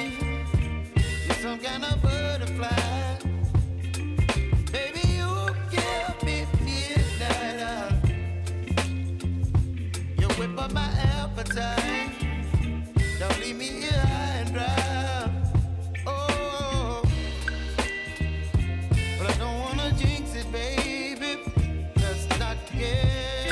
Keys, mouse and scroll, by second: 1.5 click, 2.1 space, 6.9 click, 12.8 click, 14.4 space, 17.0 click, 19.3 space.